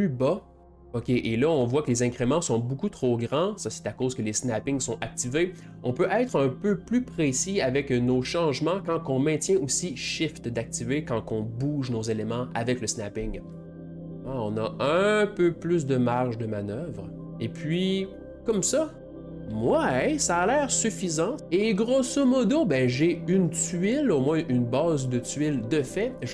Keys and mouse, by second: 5.6 middle click, 20.2-21.4 middle drag, 23.2-26.2 middle drag.